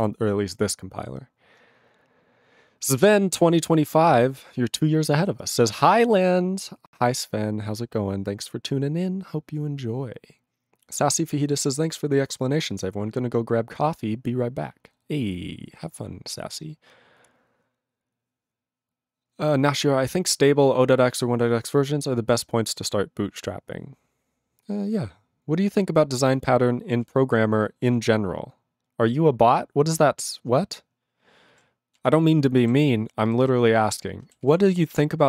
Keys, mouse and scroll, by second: 0.0 ctrl+s, 27.0 ctrl+s, 31.5 ctrl+a, 31.9 ctrl+e, 32.8 ctrl+s, 33.2 ctrl+b, 33.4 ctrl+b, 34.4 ctrl+s.